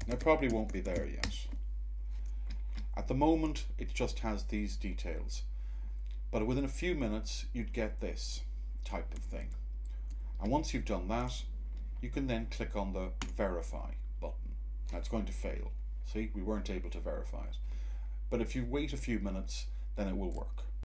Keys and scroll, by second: 0.0-1.3 typing, 9.3 Tab.